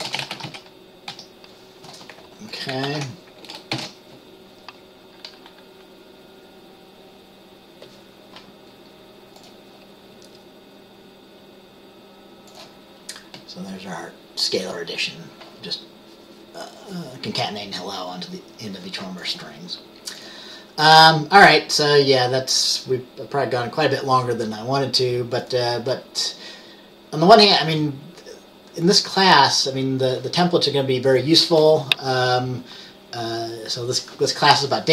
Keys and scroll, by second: 0.0-1.2 typing, 2.9 ctrl+s, 3.8 ctrl+b.